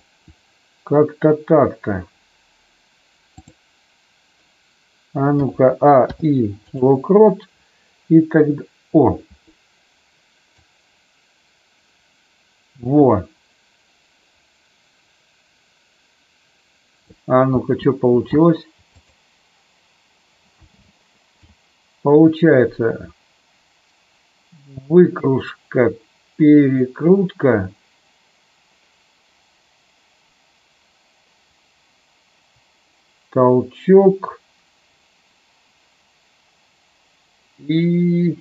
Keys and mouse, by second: 3.3 click, 5.3 a, 5.9 i, 10.6-17.0 drag, 17.5 space, 18.9 click, 20.6 space, 21.4-38.4 drag.